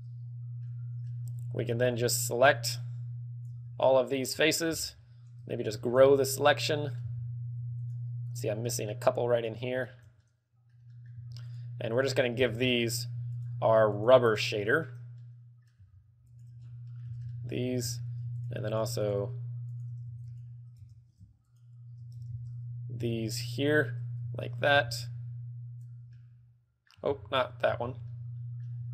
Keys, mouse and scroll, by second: 0.9 middle click, 2.2 ctrl+click, 3.7 ctrl+click, 4.1 middle click, 4.7 shift+middle click, 5.0-5.6 scroll up 3, 5.9 ctrl+KP_Add, 6.6 middle click, 7.3 z, 8.1 shift+right click, 8.5 shift+right click, 8.9 shift+middle click, 9.6 shift+right click, 10.1 shift+middle click, 10.5 middle click, 11.2 middle click, 11.3 shift+middle click, 11.7 shift+right click, 12.2 shift+right click, 12.6 b, 13.6 shift+right click, 14.2 shift+right click, 14.7 shift+right click, 14.9 shift+middle click, 15.5 middle click, 16.6 shift+right click, 16.9 scroll down 4, 17.1 middle click, 17.3 z, 17.5 shift+middle click, 17.8 scroll up 6, 18.1 z, 18.7 shift+right click, 19.1 shift+right click, 19.5 shift+right click, 20.0 shift+right click, 20.5 alt+shift+right click, 20.6 alt+shift+right click, 21.4 ctrl+z, 21.8 alt+shift+right click, 22.0 ctrl+z, 22.8 ctrl+z, 23.2 ctrl+z, 23.7 ctrl+z, 23.9 alt+shift+right click, 25.0 b, 26.1 b, 26.4 middle click, 27.6 ctrl+z, 28.2 ctrl+z, 28.3 middle click.